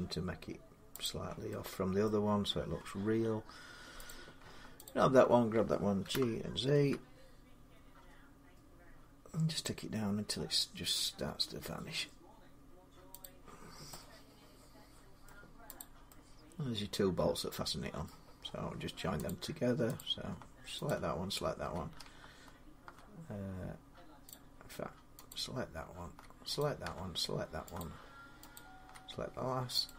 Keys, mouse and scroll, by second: 0.7 r, 1.8 middle click, 1.9 typing, 2.2 scroll up 4, 3.9 click, 4.6 shift+click, 5.8-6.7 typing, 6.7 middle click, 13.0 click, 13.4 scroll, 15.0-16.0 middle click, 15.6 click, 17.8-22.9 middle click, 18.2 scroll down 5, 19.0 click, 19.8 click, 20.6 shift+click, 20.7 shift+click, 24.1 click, 25.1 click, 27.5 click, 27.6 shift+click, 29.3 click, 29.6 shift+click, 29.6 right click.